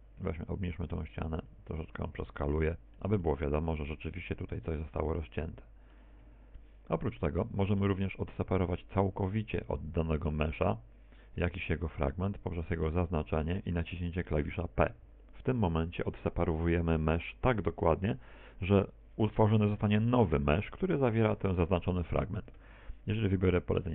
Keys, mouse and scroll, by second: 0.5 middle click, 13.1 right click, 13.9 shift+right click, 14.9 shift+right click, 15.5 shift+right click, 17.1 p.